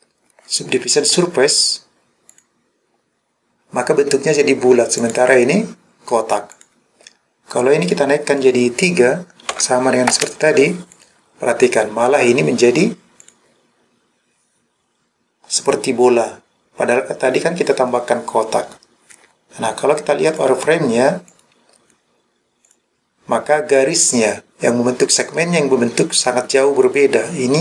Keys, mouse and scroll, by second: 5.1 click, 6.6 click, 7.9-10.2 drag, 11.0 click, 13.2 click, 20.4 click, 21.4 click, 22.7 click.